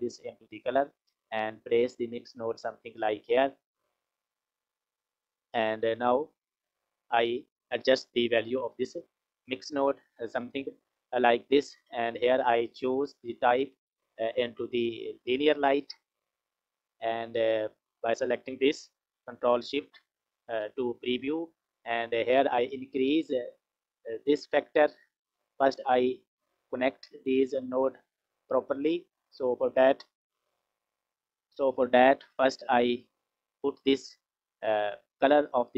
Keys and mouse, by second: 1.1-2.3 drag, 3.2 click, 3.2 right click, 4.1 click, 5.2 click, 6.1 click, 6.3 click, 12.4-15.9 drag, 17.7 click, 19.5 ctrl+shift+click, 21.6 click, 25.7 click, 26.7 click, 28.0 click, 29.4 click, 31.1 F6, 32.8 click, 33.2-35.7 drag.